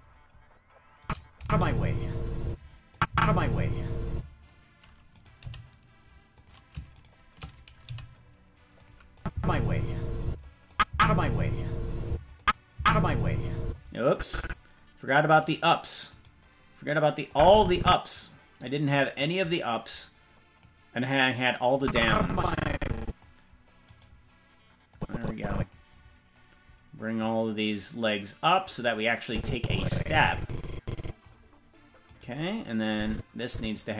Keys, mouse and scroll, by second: 1.0 click, 1.3 space, 2.4 space, 2.9 click, 3.1 space, 4.1 space, 5.1 right click, 5.4 g, 6.9 shift+right click, 7.8 g, 9.1-10.3 drag, 9.3 space, 10.2 space, 10.7 click, 10.8 space, 12.0 space, 12.4 click, 12.7 space, 13.6 space, 14.1 click, 15.4 right click, 17.3 click, 19.1-20.6 drag, 21.8-23.2 drag, 23.9 right click, 24.9 click, 27.1-28.7 drag, 29.2-31.2 drag, 32.1 right click, 32.9 click.